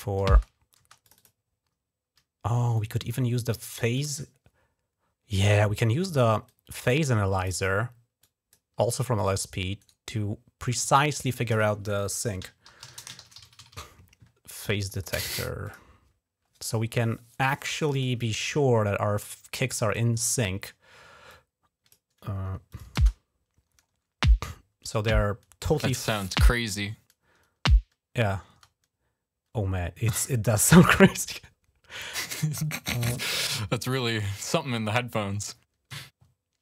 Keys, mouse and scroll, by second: 0.1 space, 0.6 space, 0.8 click, 1.0 click, 2.6-3.8 drag, 6.3 click, 7.2 click, 8.0 click, 9.0 click, 9.6 right click, 10.7 click, 12.2-14.0 typing, 14.6 click, 15.4 click, 17.6 click, 17.7 click, 19.0 click, 21.1 click, 22.5 click, 22.8 space, 28.3 space, 32.9-34.1 drag.